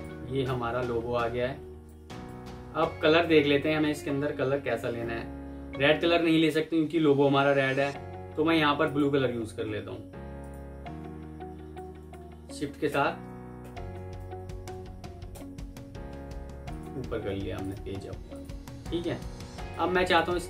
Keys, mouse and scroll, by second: 0.4 Escape, 1.3 F2, 2.3 Escape, 11.7 alt+click, 12.8 shift+Page_Up, 14.1 Escape, 15.2 shift+Page_Up, 16.6 shift+click, 16.8 typing, 17.2 Escape, 19.1 F2, 20.2 Escape.